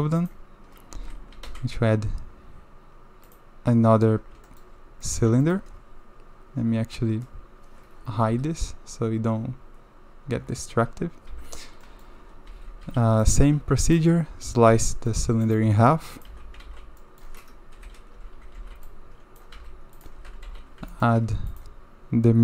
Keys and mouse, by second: 0.9 alt+a, 1.4 shift+a, 4.5 shift+middle drag, 5.0 middle click, 5.4 shift+middle click, 11.3 n, 11.8 click, 12.5 Tab, 12.8 1, 13.2 click, 13.9 shift+click, 14.7 j, 14.9 drag, 16.3 shift+r, 16.6 shift+z, 17.0 click, 17.7-20.5 typing, 20.2 Tab, 20.9 shift+middle drag.